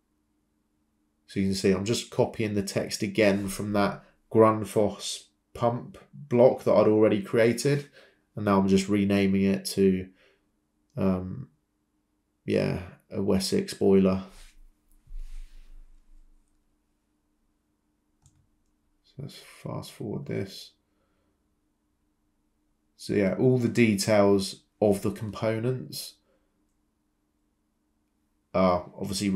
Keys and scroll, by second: 5.9 typing, 8.2 typing, 9.2 Return, 12.5-13.3 typing, 15.0-15.7 typing, 18.2-19.0 typing, 19.5 Down, 20.5 Escape, 25.3-27.4 typing.